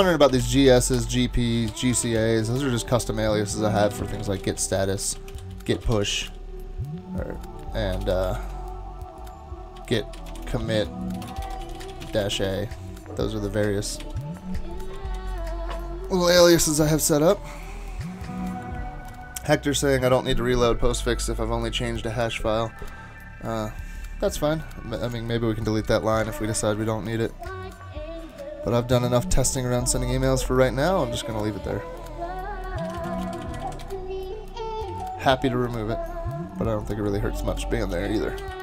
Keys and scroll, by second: 0.1-2.4 typing, 3.6-6.8 typing, 7.9-12.7 typing, 14.0 ctrl+c, 15.1 super+k, 32.6-34.3 typing, 37.9 super+w, 38.4 super+w.